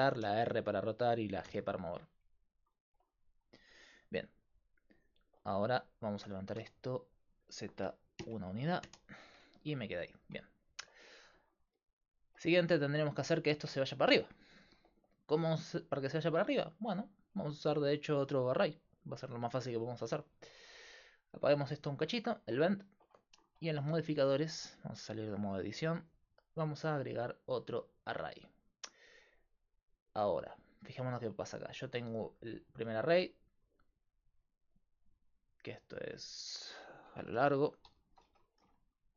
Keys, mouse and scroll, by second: 0.2 r, 1.5 g, 6.3 g, 21.1-22.8 drag, 22.2-23.4 middle drag, 22.2 right click, 25.9-29.7 drag, 29.7-32.0 middle drag, 32.8-38.9 drag, 38.9 BackSpace.